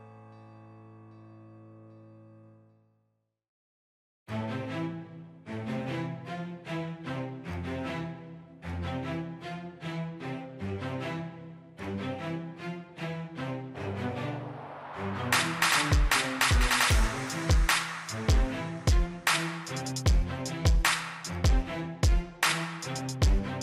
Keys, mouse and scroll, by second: 4.3 middle click, 5.4-5.8 scroll up 1, 5.8-8.5 scroll down 1, 8.5 middle click, 9.7 scroll down 1, 9.9 scroll up 1, 10.2-10.9 scroll down 1, 10.9-11.5 scroll up 1, 11.5 click, 13.8-15.7 middle drag.